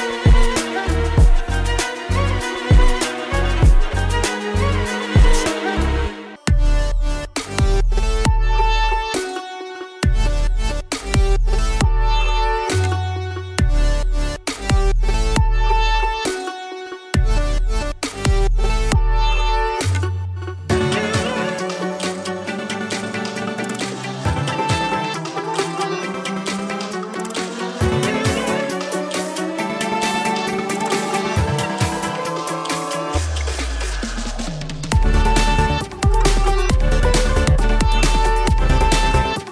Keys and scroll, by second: 6.6 space, 14.6 ctrl+z, 23.1 space, 23.9 ctrl+z, 36.9 space.